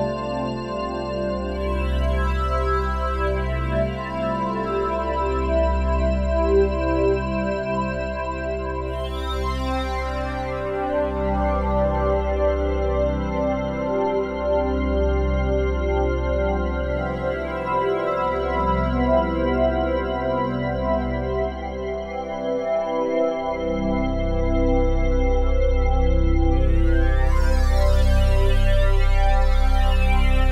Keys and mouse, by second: 0.6 click, 1.4 click, 2.8 click, 3.6 click, 8.7 click, 10.5 click, 11.2-13.5 drag, 14.1 click, 19.4-30.5 drag.